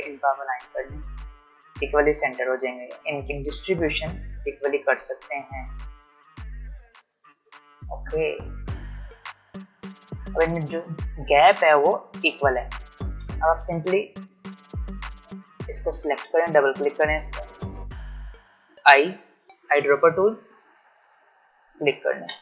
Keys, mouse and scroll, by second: 7.8 click, 11.9-12.3 alt+scroll down 1, 12.9-13.4 alt+scroll up 1, 14.0 click, 18.7 i, 21.0 click.